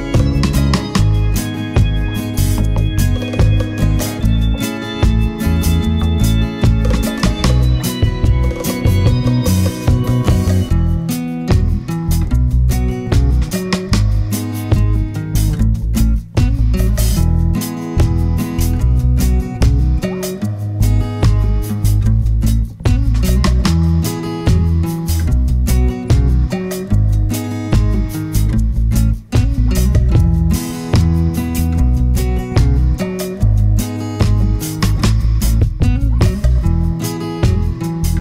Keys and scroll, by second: 29.9 super+c, 30.2 super+v.